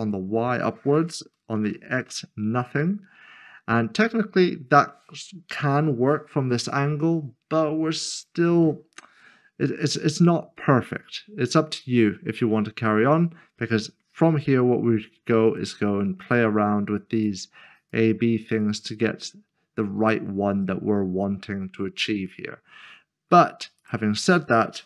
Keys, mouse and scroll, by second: 1.6 d, 2.0 Return, 8.6 Return, 9.4 middle click, 13.6 middle click, 14.7 scroll down 1, 15.5 click, 18.9 double click, 20.5 click, 23.8 click.